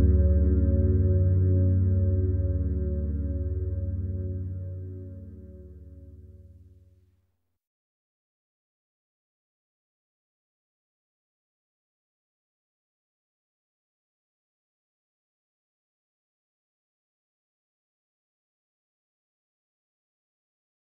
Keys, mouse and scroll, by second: 3.3-4.9 scroll up 1, 4.9-7.2 scroll down 1, 7.2 click, 13.3 click, 19.3-20.8 drag.